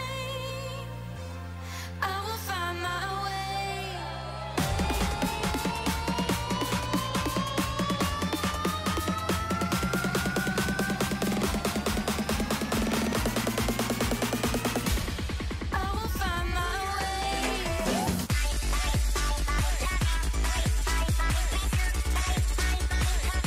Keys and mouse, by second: 0.6 shift+h, 1.5 a, 1.9 k, 3.2 a, 3.7 k, 5.4 a, 5.9 k, 7.3 a, 8.1 k, 10.0 k, 12.4 a, 12.6 a, 12.7 w, 13.1 a, 14.6 shift+h, 15.3 a, 15.7 k, 17.1 a, 19.0 k, 22.7 a, 23.1 k.